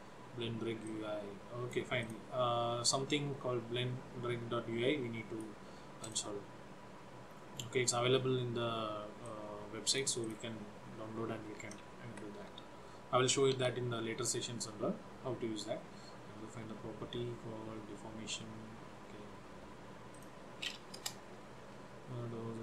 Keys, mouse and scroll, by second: 1.0 click, 2.1 click, 2.9 click, 6.1 click, 7.4-7.9 scroll down 2, 7.9-9.1 scroll up 2, 9.3 click, 10.3 click, 12.2 Up, 12.5 End, 13.7 Home, 20.2 click, 21.1 Return.